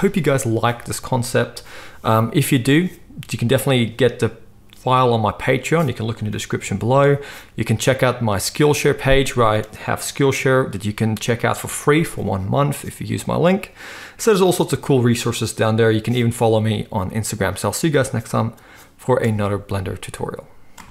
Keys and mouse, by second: 19.2 space, 20.7 space.